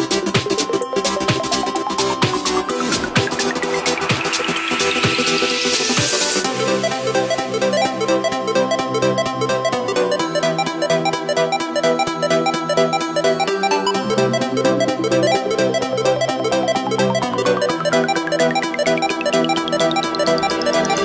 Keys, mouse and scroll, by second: 0.1 middle click, 0.7 s, 2.7 middle click, 3.4-3.8 scroll up 2, 3.8-6.1 middle drag, 6.1-12.4 drag, 13.2-17.0 drag, 17.0-18.5 middle drag, 18.5 click, 18.9 scroll up 1, 19.1 right click, 19.4-19.8 middle drag, 19.8-20.1 scroll down 2, 20.1-21.0 middle drag.